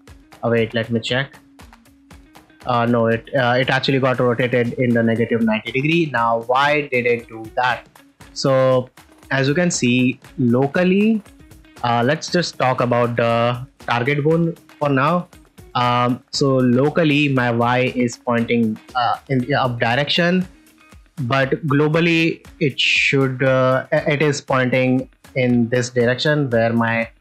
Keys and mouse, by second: 0.1 click, 0.4 shift+middle drag, 1.6 r, 1.7 x, 3.0 right click, 5.4 middle click, 5.8 ctrl+middle drag, 8.4-8.7 ctrl+middle drag, 9.7 shift+middle drag, 10.2 ctrl+middle click, 11.8 drag, 13.2 middle click, 13.7 shift+middle click, 14.0 ctrl+middle click, 14.2 middle drag, 14.9 middle drag, 15.2 ctrl+middle drag, 19.6 ctrl+middle drag, 20.1 middle click, 20.6-21.0 ctrl+middle drag, 24.8-25.4 middle drag, 25.7-26.1 middle drag.